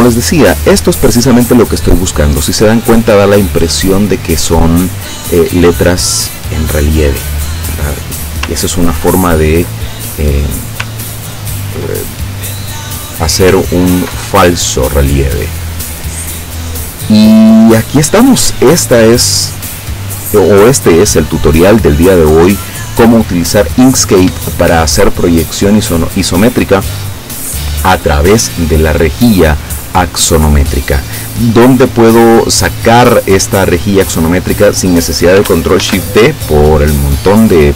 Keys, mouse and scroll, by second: 8.7-9.2 ctrl+scroll down 4, 9.8 ctrl+click, 11.0 ctrl+scroll down 2, 12.1 ctrl+click, 12.9 click, 13.8-14.4 ctrl+scroll down 2, 14.4-15.4 ctrl+drag, 35.9 ctrl+shift+d, 37.3 click.